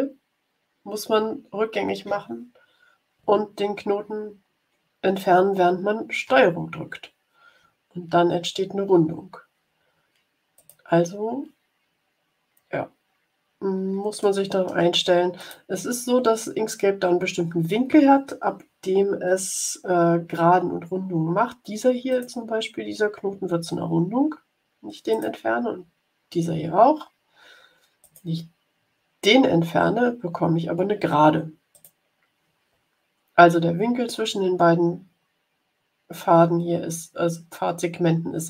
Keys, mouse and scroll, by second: 6.2 ctrl+Delete, 10.5 click, 12.5-12.8 scroll down 1, 13.5 scroll down 1, 14.1 click, 14.3 middle click, 15.3 click, 22.0 click, 23.1 Delete, 25.0 click, 26.2 Delete, 27.9 click, 28.7 Delete, 31.6 click.